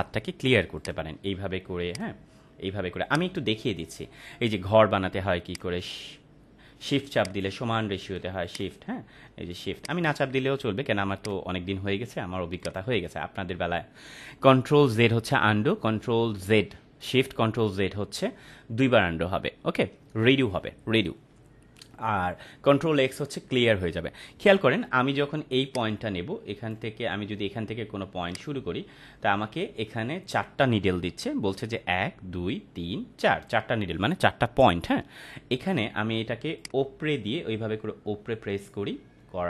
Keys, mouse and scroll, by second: 0.8 click, 5.4 click, 7.2 shift+click, 8.4 shift+click, 25.6-26.9 drag, 29.3 ctrl+z, 36.5-39.4 drag.